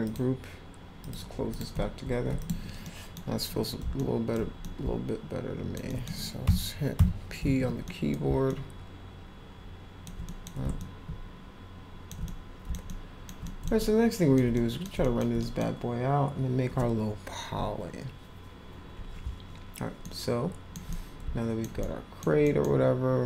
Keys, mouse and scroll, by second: 0.0 click, 1.0 click, 1.5 click, 2.4 click, 2.8 middle drag, 4.0 alt+middle click, 4.6-5.7 alt+middle drag, 5.9 middle drag, 7.9 middle drag, 8.5-10.0 alt+middle drag, 10.3 middle click, 10.8-12.1 alt+middle drag, 12.2 middle click, 12.9 alt+middle click, 13.4 middle click, 13.8 alt+middle click, 14.5 middle click, 15.0 alt+middle click, 15.4 middle click, 20.0 alt+middle click, 20.9-21.6 middle drag, 21.8 middle click, 22.4 middle click.